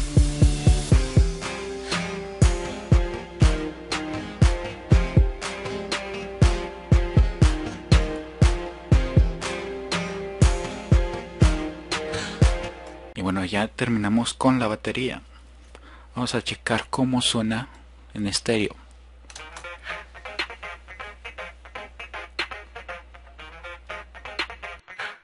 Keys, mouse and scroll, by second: 13.5 drag, 16.1-17.8 drag, 18.0 drag.